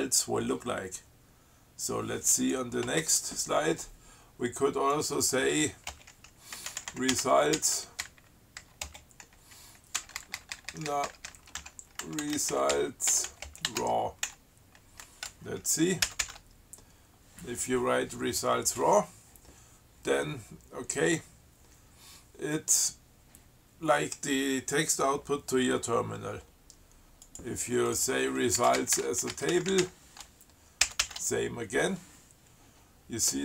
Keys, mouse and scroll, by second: 2.7 click, 3.1 space, 5.2 click, 6.2-9.1 typing, 10.2 BackSpace, 11.6-15.0 typing, 16.3 ctrl+c, 27.5 click, 28.2 click, 28.8-30.6 typing, 31.1 ctrl+c.